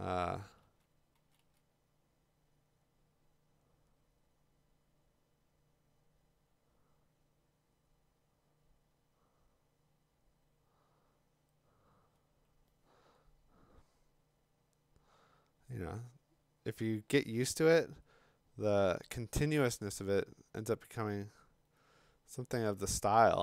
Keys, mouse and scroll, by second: 0.2-1.4 typing.